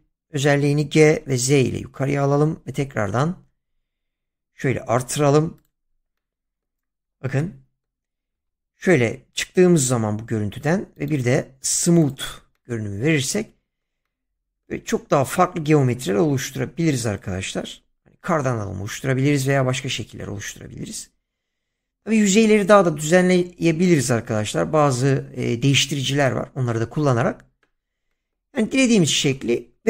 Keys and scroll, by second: 1.2 z, 8.4 Tab, 20.1 Tab, 28.7 Tab.